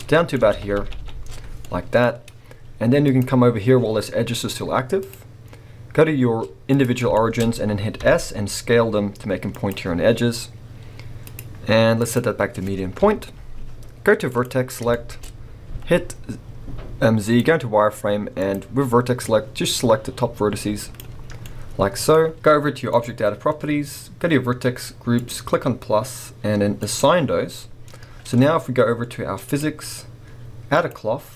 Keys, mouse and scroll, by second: 2.1-3.0 scroll, 3.0-7.2 drag, 7.2 shift+middle click, 7.4 scroll, 8.0 s, 9.7 click, 11.3-14.4 drag, 13.0 KP_1, 14.9 shift+middle click, 15.7 z, 18.4 click, 19.3 click, 21.4-22.9 middle drag, 22.9 click, 25.2-29.6 drag, 30.7-31.3 drag.